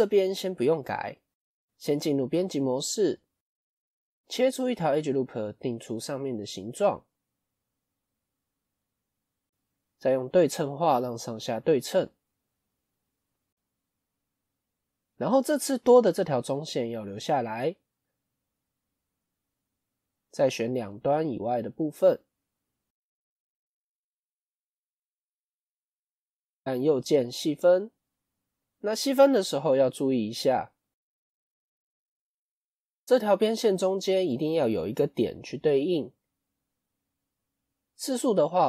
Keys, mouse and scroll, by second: 1.6 Tab, 10.2-14.1 drag, 18.9 click, 20.2 click, 20.7 click, 22.6 click, 28.0 middle click, 28.6 scroll up 2, 30.2 click, 30.5 click, 32.8-35.8 middle drag, 37.0 click.